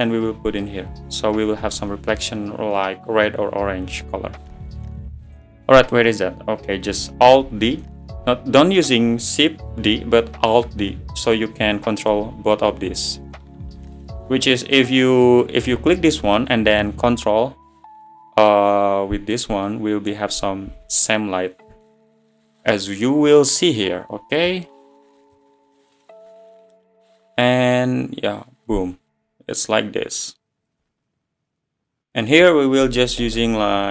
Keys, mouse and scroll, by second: 5.4 click, 6.0 click, 7.4 alt+d, 8.1 1, 9.3 `, 9.8-10.3 scroll down 12, 10.8-11.5 scroll down 10, 14.2-15.1 middle drag, 15.1 click, 23.2 scroll down 10, 26.5 click, 28.3 click, 29.2-29.6 scroll up 8, 29.6-30.9 drag, 30.9-32.1 drag, 32.8 click, 33.5 0.